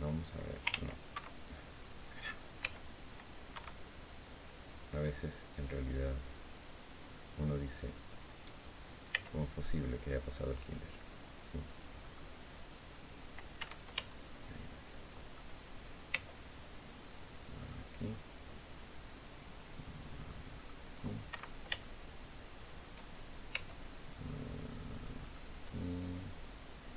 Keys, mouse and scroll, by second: 0.9 Escape, 2.3 c, 2.6 click, 3.3 Escape, 8.8 c, 9.2 middle click, 11.7 middle click, 13.3 Escape, 13.8-15.2 shift+drag, 15.8 c, 17.3 click, 20.3 click, 21.0 Escape, 21.5-22.7 shift+drag, 23.2 c, 24.9 click.